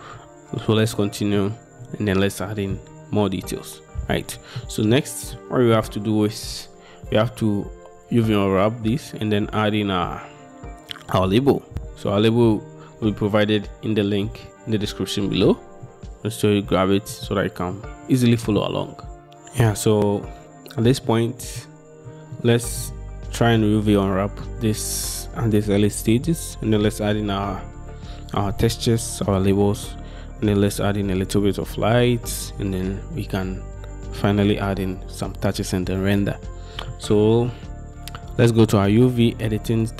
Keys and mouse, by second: 4.7-5.0 shift+middle drag, 5.4-5.9 middle drag, 16.8-17.2 shift+middle drag, 17.8-18.7 middle drag, 21.2 middle click, 22.4-22.9 shift+drag, 37.0-37.6 drag.